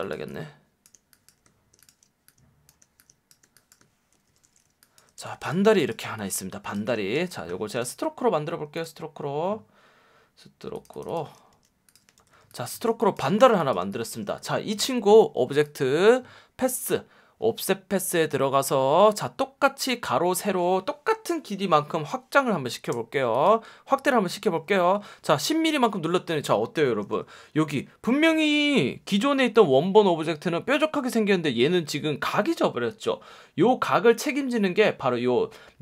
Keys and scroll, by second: 4.2 shift+m, 5.1 v, 5.6 space, 7.1 shift+x, 11.5 x, 12.2 v, 12.8 space, 13.5 space, 27.0 F1.